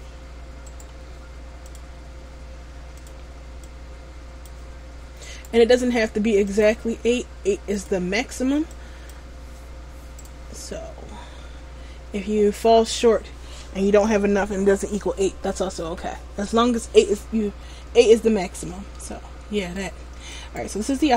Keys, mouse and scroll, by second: 0.8 right click, 1.7 click, 5.4 right click, 6.6 click, 10.7 middle click, 18.2 shift+middle click, 19.1 middle click, 20.5 right click.